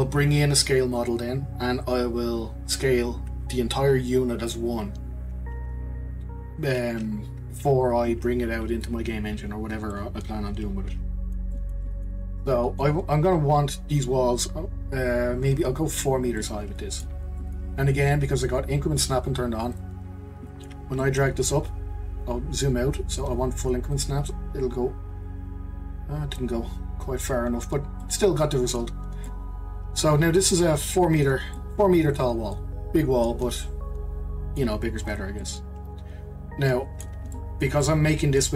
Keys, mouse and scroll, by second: 9.9-15.5 middle drag, 16.4-19.7 middle drag, 19.7 click, 20.2-20.5 scroll up 1, 20.5-22.2 shift+middle drag, 22.2-22.8 scroll down 2, 22.8-23.9 scroll down 1, 23.9 click, 26.5-27.0 scroll down 2, 27.0-28.0 scroll up 4, 28.0-34.5 middle drag, 35.0 click, 35.4-38.5 middle drag.